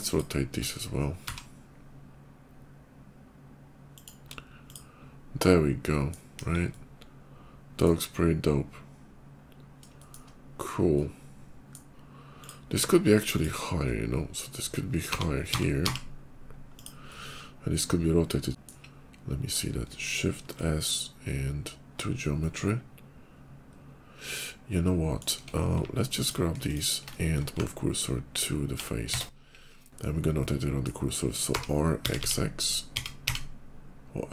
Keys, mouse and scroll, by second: 1.1 r, 3.8 click, 4.3 click, 4.7 scroll down 1, 5.2 middle click, 6.3 KP_5, 6.5 middle click, 8.5 scroll up 1, 9.8 shift+middle click, 10.7 shift+middle click, 12.1 click, 13.1 click, 13.6 middle click, 15.0 g, 15.3 x, 15.6 x, 16.1 g, 16.6 click, 16.9 middle click, 18.4 g, 19.1 /, 20.4 shift+s, 20.9 shift+s, 22.1-23.6 middle drag, 23.6-25.0 drag, 25.2 Tab, 26.0 alt+click, 26.4 alt+shift+click, 27.4 shift+s, 28.0 shift+s, 28.9 Tab, 29.6 /, 30.2 middle click, 31.3 r, 31.8 x, 32.0 x.